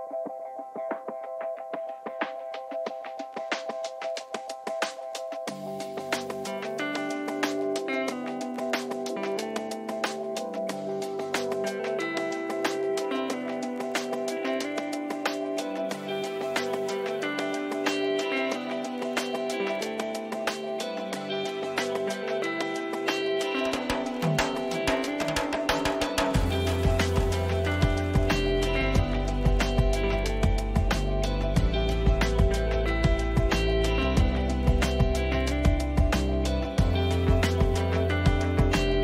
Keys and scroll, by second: 0.0 space, 9.9 ctrl+t, 15.7 Return, 16.2 ctrl++, 29.0 Left, 31.8 ctrl+z, 33.5 ctrl+shift+z, 38.5 ctrl+t.